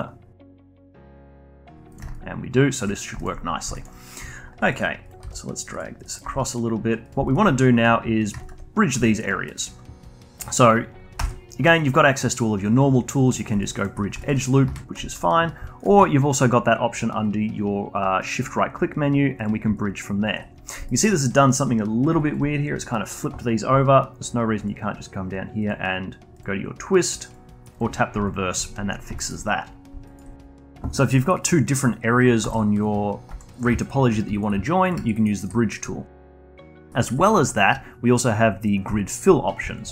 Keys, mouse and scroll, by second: 0.4 shift+click, 0.9 shift+drag, 1.4 shift+click, 1.9 shift+click, 2.1 alt+click, 3.2 alt+click, 3.5 scroll up 1, 3.7-5.1 alt+drag, 5.2 g, 6.0 click, 6.2 g, 7.2-7.8 alt+drag, 8.2 shift+drag, 8.4-9.5 alt+drag, 9.5-11.2 alt+middle drag, 11.2 ctrl+e, 13.6-14.7 alt+drag, 14.7 ctrl+z, 15.1-15.8 alt+drag, 15.8-18.8 shift+right drag, 19.7 alt+click, 20.6 scroll up 1, 20.9-22.2 alt+middle drag, 22.2-27.8 alt+drag, 28.2-29.2 alt+drag, 29.2-29.7 alt+middle drag, 29.7-30.0 scroll down 1, 30.0 alt+drag, 32.5 drag, 32.7 click, 33.3 3, 33.5 drag, 33.8 shift+click, 34.3-34.9 alt+drag, 35.1 alt+middle click, 35.3 alt+click, 36.3 a, 36.4 a, 36.7-39.9 alt+drag.